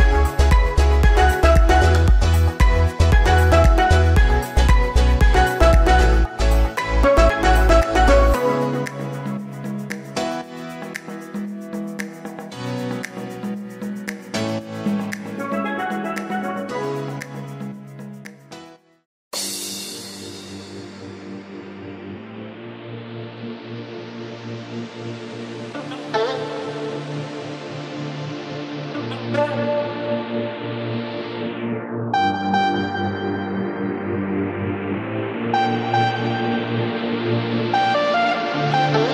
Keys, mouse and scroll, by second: 1.0 middle click, 1.7 scroll down 1, 2.7 shift+d, 5.4 shift+r, 5.6 shift+r, 5.8 shift+r, 6.0 shift+r, 7.3 click, 7.5-7.9 scroll down 2, 7.9-8.5 middle drag, 8.5 scroll down 1, 8.8-9.9 shift+middle drag, 9.9-10.3 scroll up 1, 10.3 shift+middle click, 10.9-12.8 drag, 13.0 click, 14.0 click, 14.3 click, 15.4-17.4 drag, 17.4-18.4 middle drag, 18.4 KP_1, 18.7-19.2 scroll down 1, 19.2-19.5 shift+middle drag, 19.5-19.9 scroll up 4, 19.9 shift+middle drag, 20.2 click, 20.8 ctrl+s, 21.9-22.3 scroll up 1, 22.3-23.3 shift+middle drag, 23.3 shift+a, 24.6 r, 26.6 g, 28.0 scroll up 1, 29.1-30.2 drag, 31.5 click, 31.9-32.3 scroll up 2, 32.3-32.7 shift+middle drag, 32.7 alt+z, 33.2-33.7 scroll up 2, 33.7 shift+middle drag, 33.9-34.6 scroll up 2, 34.7 g, 36.6-37.0 scroll down 8, 37.0 shift+middle click, 37.5 Tab, 38.3 g.